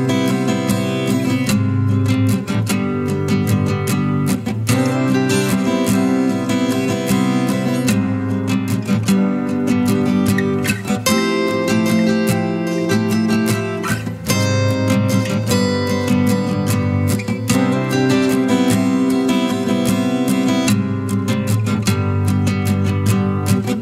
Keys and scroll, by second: 0.8 ctrl+KP_Subtract, 6.8 ctrl+KP_Add, 13.4 ctrl+KP_Add.